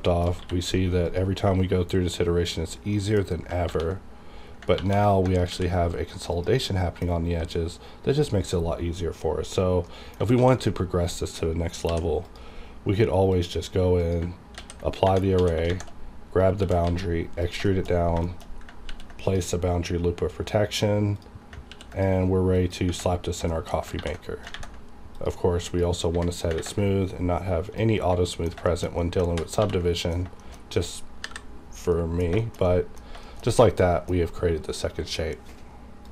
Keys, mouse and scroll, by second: 0.0 shift+middle click, 0.3 shift+scroll up 1, 0.4 q, 1.1 click, 1.4 scroll up 1, 2.5 click, 2.7 scroll down 1, 2.9 middle click, 3.3 scroll up 1, 3.7 ctrl+1, 4.8 ctrl+2, 5.5 alt+v, 6.3 click, 6.7 middle click, 7.1 scroll up 2, 7.4-9.3 scroll down 1, 9.9 middle click, 10.3 shift+d, 11.1 right click, 11.9 h, 12.2 click, 14.6 ctrl+a, 15.0 Tab, 15.6 a, 15.7 shift+`, 16.3 scroll up 1, 16.6 e, 16.8 z, 17.4 click, 17.7 shift+middle click, 17.9 scroll up 1, 18.2 shift+middle click, 18.4 shift+scroll up 1, 18.9 ctrl+r, 19.3 click, 21.7 ctrl+r, 21.9 ctrl+click, 22.5 click, 23.3-23.9 scroll down 2, 23.5 shift+middle click, 24.0 ctrl+1, 24.8 ctrl+`, 25.2 click, 26.6 ctrl+`, 27.7 click, 27.7 click, 28.3 middle click, 28.4 scroll down 1, 28.7 shift+middle click, 28.9 scroll up 1, 29.0 middle click, 29.3 ctrl+2, 30.0 middle click, 30.2 scroll down 1, 30.4 shift+middle click, 31.2 KP_5, 31.9 middle click, 32.7 middle click, 33.5 scroll down 1, 34.0-35.9 middle drag.